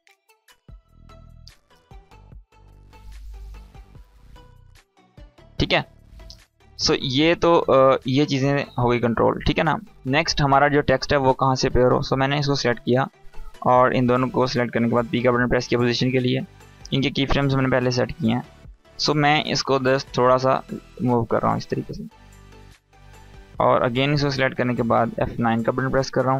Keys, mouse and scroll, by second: 1.2 space, 5.0 space, 5.2-5.9 drag, 13.9 shift+click, 14.8 p, 17.5-19.7 drag, 25.0 F9, 25.9 click, 25.9-26.3 drag.